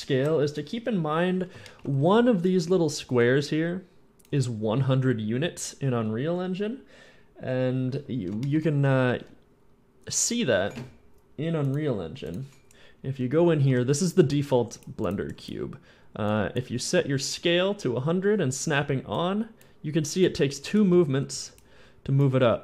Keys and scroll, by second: 1.9-3.8 typing, 12.7-16.0 typing, 21.4 w, 21.4 s.